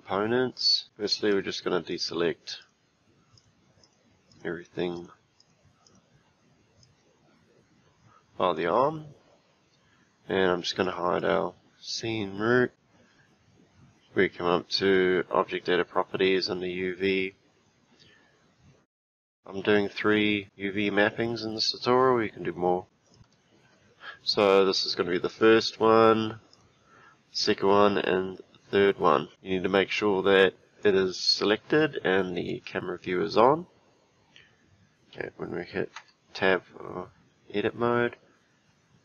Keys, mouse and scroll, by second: 1.3 click, 1.9 click, 2.6 click, 3.4 click, 3.8 click, 4.3 click, 5.0 click, 5.4 click, 5.9 click, 6.8 click, 10.8 click, 11.2 click, 17.7-19.1 scroll down 1, 19.1 click, 22.8 click, 23.1 click, 25.3 click, 26.5 click, 30.8 click, 32.5 click, 35.9 Tab.